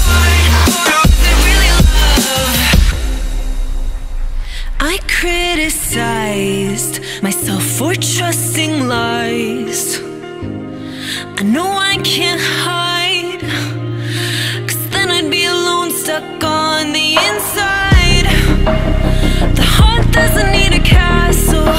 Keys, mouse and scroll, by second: 0.6 alt+middle click, 0.7 alt+right click, 0.7 alt+click, 2.1-2.5 scroll up 2, 2.5-2.8 scroll down 3, 2.8 click, 3.0 scroll up 1, 3.1 alt+drag, 3.3-3.9 alt+middle drag, 3.9 click, 4.6 click, 7.6 scroll down 1, 7.8 alt+click, 9.6-10.7 drag, 10.7 s, 11.4 right click, 11.7 click, 15.1-16.3 drag, 16.3 s, 19.5-20.5 drag.